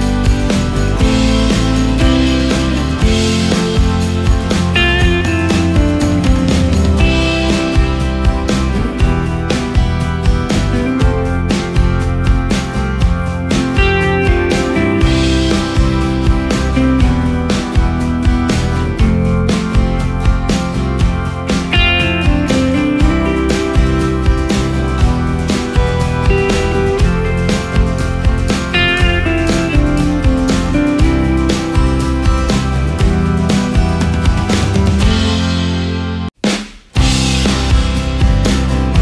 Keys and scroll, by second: 10.3 space, 15.2 ctrl+space, 16.6 |, 19.6 space, 20.6 ctrl+space, 31.2 space, 31.7 ctrl+space, 34.7 ctrl+space, 37.8 space, 38.9 ctrl+space.